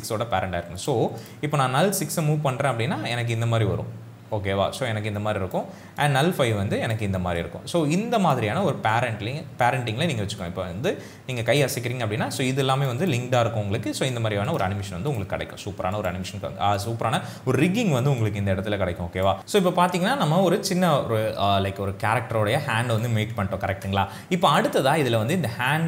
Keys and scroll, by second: 19.4 space.